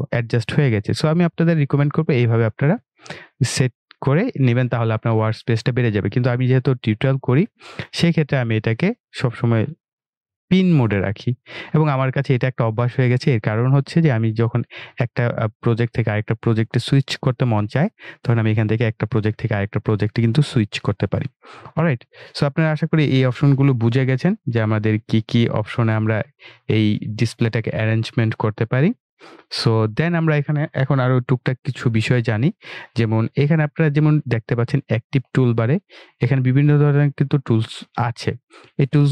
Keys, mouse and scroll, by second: 1.9 click, 10.0 click, 10.1 typing.